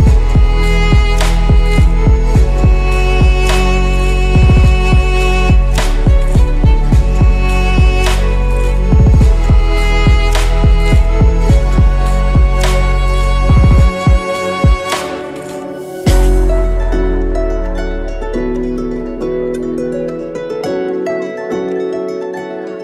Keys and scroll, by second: 0.4 Tab, 2.0 ctrl+z, 2.6 8, 2.7 F2, 12.2 Tab, 18.3 Tab, 19.1 Tab, 19.4 Tab, 21.4 Tab, 21.8 a.